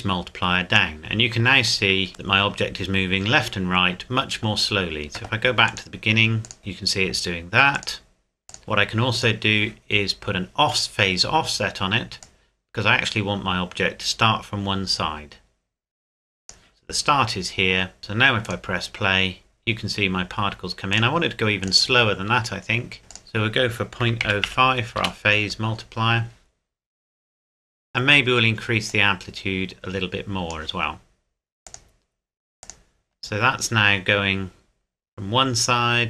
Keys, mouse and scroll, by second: 2.1 shift+middle click, 5.7 click, 7.8 click, 12.2 click, 20.9 click, 23.4 click, 24.0 KP_Decimal, 24.2 KP_0, 24.4 KP_5, 25.0 KP_Enter, 28.9 click.